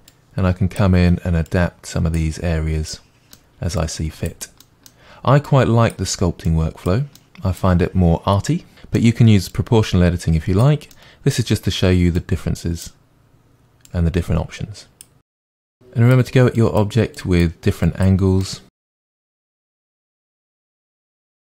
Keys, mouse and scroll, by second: 0.0 middle click, 0.1-2.9 drag, 2.9-3.8 middle drag, 3.8 click, 4.6-5.5 middle drag, 5.5-7.2 drag, 7.2-7.5 middle drag, 7.5 drag, 8.0 click, 8.5 click, 8.9 click, 9.2 middle click, 9.3 click, 9.6 middle click, 9.9 click, 10.6-11.3 middle drag, 11.3 click, 11.4-11.8 middle drag, 11.8 click, 12.0 middle drag, 12.3-12.6 drag, 12.6 middle drag, 12.8 click, 13.0 click, 13.2 drag, 13.5 click, 14.5-14.8 drag, 15.1-16.4 drag, 16.6-17.4 drag, 17.6 click, 17.9 click, 18.2-19.0 drag, 19.0 middle click, 19.2 drag, 19.3 middle click, 19.4 click, 19.6 middle click, 19.7 click, 19.8 middle click, 20.1 click, 20.2 middle drag, 20.3-20.6 drag, 20.7-21.3 drag, 21.3 middle click.